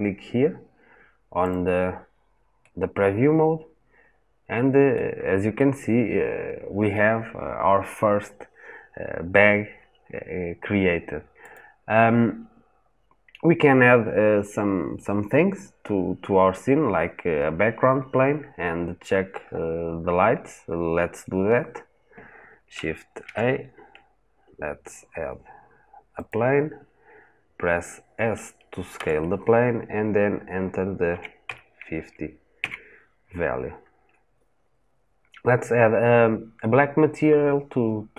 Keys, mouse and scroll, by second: 2.5-11.4 middle drag, 11.4 click, 12.5 scroll up 1, 12.7-13.9 scroll down 1, 19.2 scroll up 1, 19.3-19.9 scroll down 1, 19.9-20.7 scroll up 1, 21.0-23.2 scroll down 1, 28.9 s, 32.5 KP_Enter.